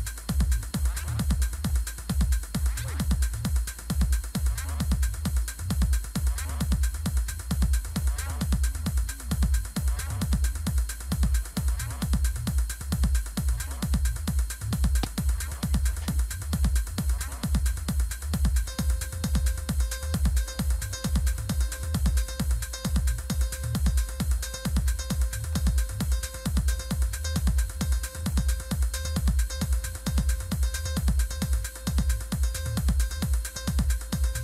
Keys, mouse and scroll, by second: 5.2 click, 18.9 click, 21.2-22.1 scroll down 1, 22.1-23.0 scroll up 2, 25.4 click, 28.2 click, 28.9 click.